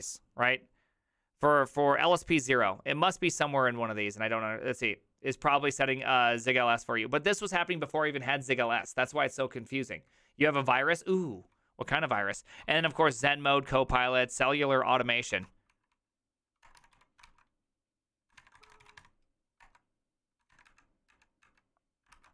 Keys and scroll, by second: 11.3-14.3 typing, 15.3 ctrl+c, 15.7-19.4 typing, 19.6 Return, 20.5 typing, 20.7 Up, 21.1 Up, 21.5 Up, 22.1 ctrl+c.